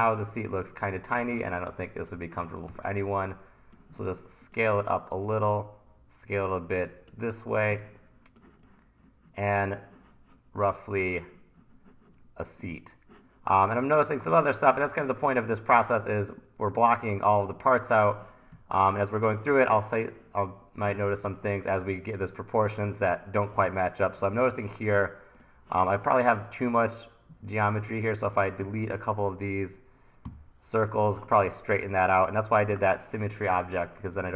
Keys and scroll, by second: 2.7 t, 15.0 1, 18.6 1, 20.9 1, 22.7 1, 30.3 Delete.